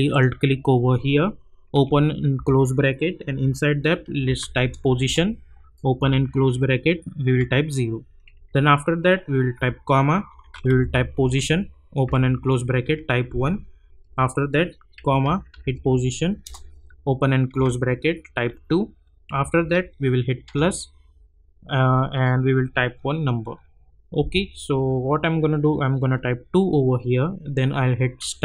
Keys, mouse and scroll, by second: 0.1 alt+click, 1.7 [, 3.3 Left, 3.8-4.9 typing, 5.0 Return, 6.0 [, 8.3 Right, 10.3-13.7 typing, 11.2 Return, 14.0 Right, 14.7-16.1 typing, 16.4 Return, 17.5 [, 19.3 Right, 20.4 shift+=, 26.0 2, 28.0 shift+8.